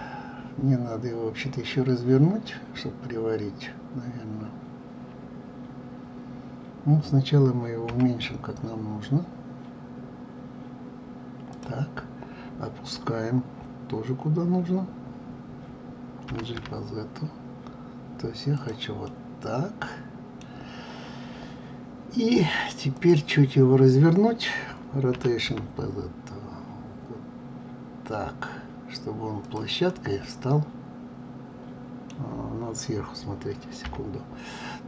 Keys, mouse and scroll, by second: 7.9 s, 16.3 g, 19.1-21.0 middle drag, 21.0 scroll down 1, 22.9 click, 25.1 r, 29.9-32.9 middle drag, 33.8 KP_7.